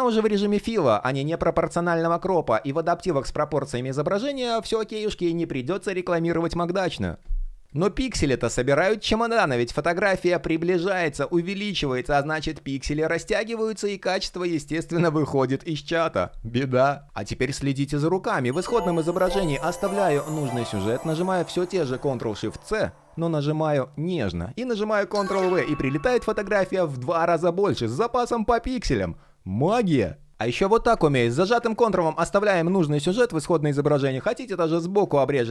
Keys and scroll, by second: 21.4 shift+super+c, 24.8 super+v.